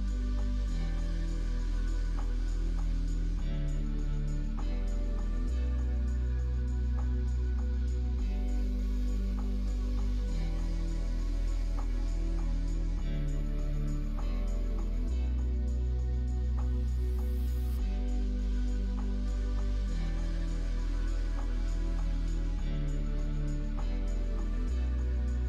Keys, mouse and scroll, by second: 1.9 ctrl+r, 4.3 ctrl+r, 6.9 ctrl+r, 11.1 middle click, 12.2 2, 13.1 alt+click, 14.1 alt+shift+click, 14.6 x, 16.5-17.9 drag, 18.3 middle click, 18.7 Tab, 19.2-20.3 middle drag.